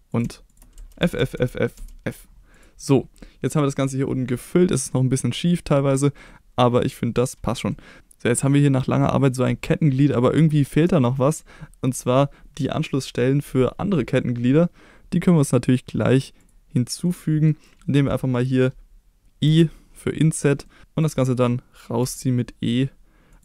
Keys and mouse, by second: 0.8-1.8 typing, 2.5 click, 2.9 middle click, 4.9 middle click, 6.3 middle click, 7.5 middle click, 8.5 middle click, 15.6 click, 16.4 click, 17.0 middle click, 19.5 i, 20.4 click, 20.7 middle click, 21.0 click, 21.2 middle drag, 22.0 e, 23.3 click.